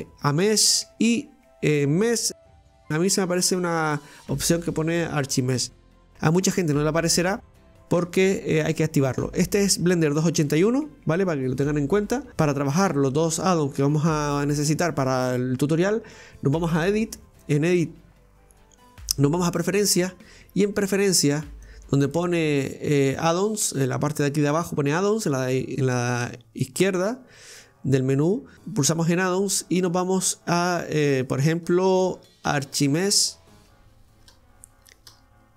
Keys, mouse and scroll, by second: 16.8-19.9 drag.